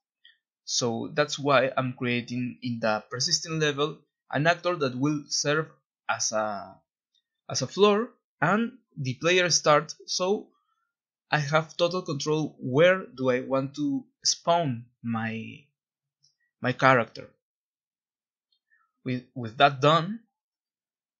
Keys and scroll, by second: 16.3 End, 18.2 a, 18.4 a, 19.8 Escape.